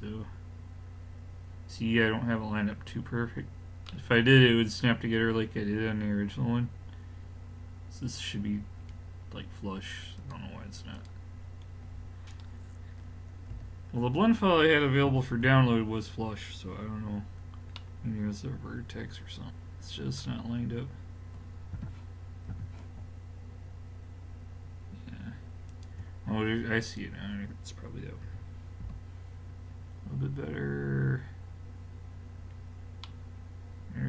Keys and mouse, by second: 3.1-5.9 middle drag, 8.8-10.2 middle drag, 10.2-11.8 drag, 11.8-13.5 middle drag, 13.5 l, 15.1 a, 15.5 a, 21.8 g, 26.9-28.6 drag, 28.3 x, 33.0 middle click.